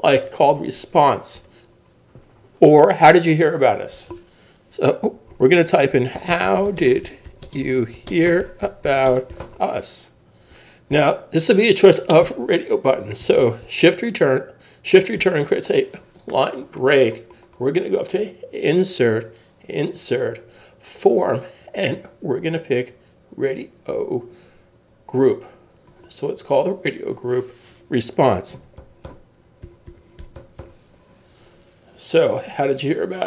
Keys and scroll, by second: 1.3 Return, 5.3 shift+h, 6.7-9.9 typing, 10.9 shift+?, 12.2 Return, 15.2 shift+Return, 28.3-31.1 typing.